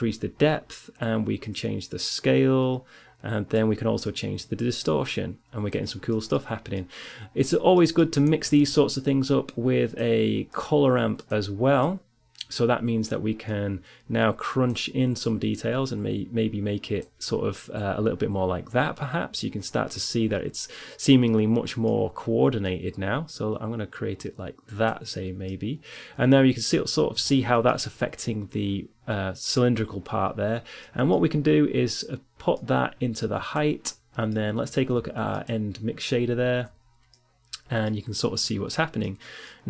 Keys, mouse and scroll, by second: 0.2-2.9 drag, 3.8-6.0 drag, 6.2 middle click, 6.9-9.0 drag, 9.0 shift+a, 11.4 click, 15.6-17.5 drag, 21.3-22.4 middle drag, 22.4-24.8 drag, 25.8-27.8 middle drag, 27.8 click, 28.2 middle click, 31.3 middle click, 33.1-34.9 drag, 34.9-35.9 middle drag, 35.9-36.9 drag, 36.9 middle click, 39.4-39.6 middle drag.